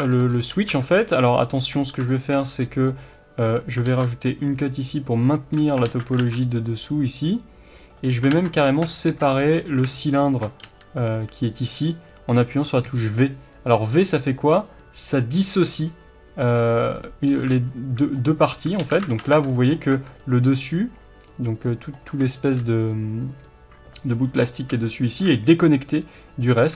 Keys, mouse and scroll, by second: 0.0 Tab, 0.3 scroll up 1, 0.6 Tab, 0.8 scroll down 1, 1.6 scroll down 1, 3.5-3.8 scroll up 1, 3.8 ctrl+r, 5.5 click, 5.8 alt+a, 6.2 ctrl+r, 8.1 right click, 8.3 ctrl+z, 8.6 scroll up 1, 8.9-10.0 shift+middle drag, 9.3 scroll down 1, 10.0 alt+click, 10.6 g, 11.6 right click, 12.8 v, 17.0 right click, 17.2-17.7 scroll down 1, 18.1-21.5 middle drag, 18.8 alt+a, 19.3 Tab, 19.9 Tab, 21.5 click, 22.0 scroll down 1, 22.3-26.7 shift+middle drag, 24.2-24.6 scroll up 1, 26.4-26.7 scroll up 3.